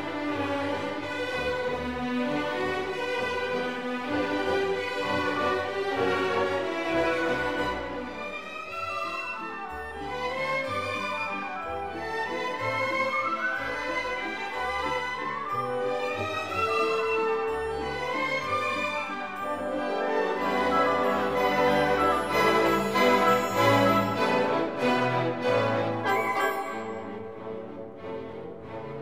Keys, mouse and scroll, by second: 3.8-5.3 right drag, 5.3-8.6 shift+middle drag, 8.6-11.3 drag, 13.1-15.4 shift+middle drag, 15.4-15.9 scroll up 1, 15.9-21.3 shift+middle drag, 15.9 click, 21.3 Tab.